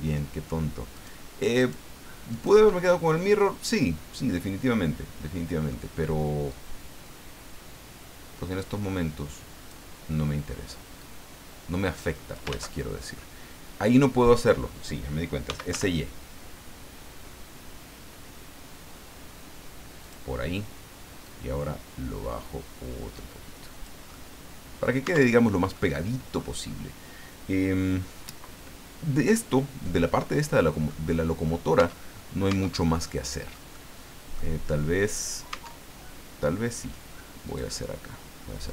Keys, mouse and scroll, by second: 0.9 shift+right click, 1.6 shift+right click, 2.3 shift+right click, 2.9-3.2 shift+scroll down 3, 3.2-5.9 middle drag, 6.5-9.9 drag, 11.0-12.5 drag, 12.5 ctrl+z, 13.2 middle click, 15.2-16.2 typing, 20.0 click, 21.2-24.0 drag, 24.1 middle click, 25.1 Tab, 25.7 middle click, 26.6 scroll down 1, 29.2-31.1 drag, 31.8 Tab, 32.5 Tab, 33.1 middle click, 33.7 middle click, 35.5 Tab, 37.5 click, 38.6 right click.